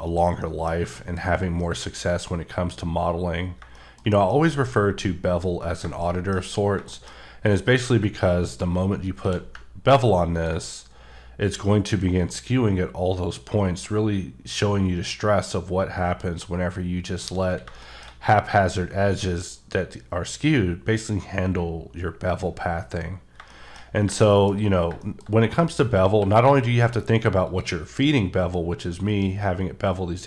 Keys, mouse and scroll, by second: 0.1 click, 0.4 middle click, 1.3 scroll up 2, 1.6 middle click, 3.4 scroll down 1, 3.7 middle click, 5.4-5.8 scroll down 2, 6.0 shift+middle click, 6.4 scroll up 1, 6.9 shift+middle click, 7.2-8.0 scroll up 1, 9.2 q, 10.3 ctrl+click, 15.5-16.1 scroll up 3, 16.6-17.1 scroll up 1, 17.1 click, 17.4 scroll down 1, 17.8 shift+middle click, 23.3 shift+middle click, 23.5 shift+double middle click, 23.7 shift+scroll down 1, 23.8 scroll up 1, 24.2 shift+middle click, 25.0 shift+double middle click, 25.2 scroll up 2, 26.1 q, 26.5 click, 27.4 click.